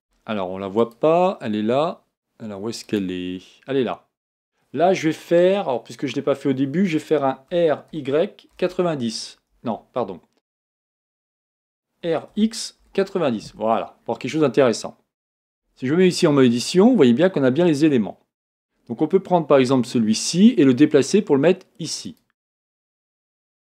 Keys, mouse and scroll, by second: 2.8 click, 7.6 r, 12.1 r, 16.0 Tab, 18.4 click, 19.6 g, 23.2 click.